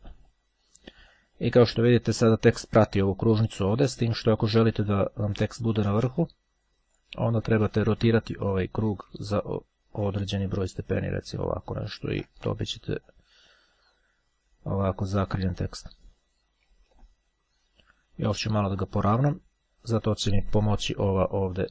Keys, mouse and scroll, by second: 1.9-2.5 scroll down 1, 7.0 click, 9.7-12.6 ctrl+drag, 13.1-17.1 drag, 17.2-18.5 ctrl+scroll up 2, 21.5-21.7 drag.